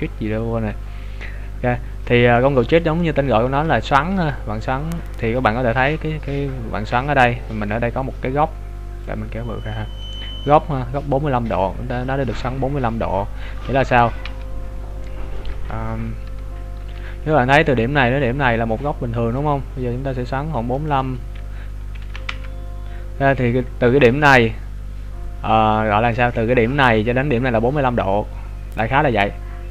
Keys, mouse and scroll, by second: 1.5-2.3 scroll down 1, 2.3 middle click, 3.5 KP_3, 4.2 KP_1, 4.6 scroll up 2, 5.7 scroll up 2, 9.0 click, 14.6 Tab, 15.5 right click, 16.0 Tab, 19.4 click.